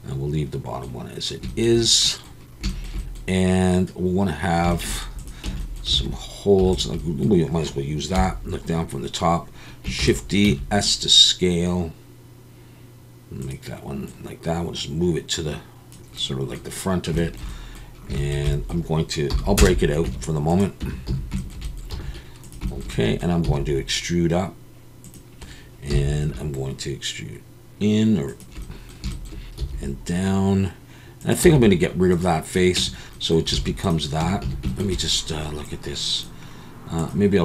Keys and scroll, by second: 5.4 Tab, 6.0 alt+a, 6.6 3, 8.1 KP_7, 10.0 shift+d, 10.4 s, 19.3 p, 20.1 Tab, 20.8 Tab, 21.1 a, 21.9 s, 23.4 e, 25.9 i, 29.6 e, 31.4 x, 33.1 Tab, 33.5 alt+a, 34.2 Tab, 34.4 a.